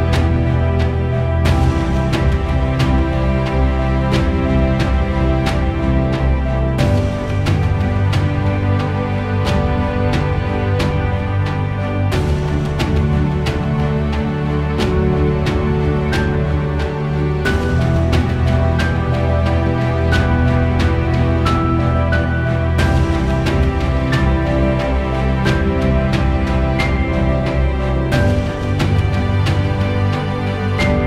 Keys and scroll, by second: 5.3 1, 5.8 0, 6.0 Return, 10.6 -, 11.1 2, 11.5 Return, 24.5 5, 25.6 BackSpace, 26.3 1, 26.7 0, 26.9 Return.